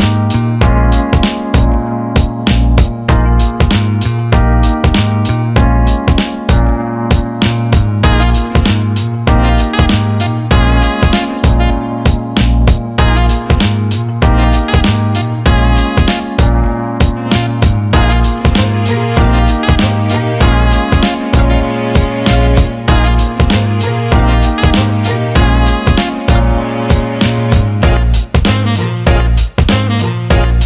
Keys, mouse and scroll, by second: 0.7-1.1 alt+middle drag, 1.7-4.9 drag, 5.1 alt+middle click, 5.7 alt+shift+middle drag, 7.7-11.2 drag, 13.8-15.7 drag, 17.3-19.7 shift+drag, 20.5 alt+middle click, 21.1 click, 21.6 alt+middle click, 21.9 alt+shift+middle click, 22.2 alt+middle click, 22.8-25.0 alt+middle drag, 25.6 alt+middle click, 25.8 alt+shift+middle click, 28.1 middle click, 28.4 middle click, 29.0 alt+shift+middle click, 30.0 click, 30.2-30.6 shift+drag.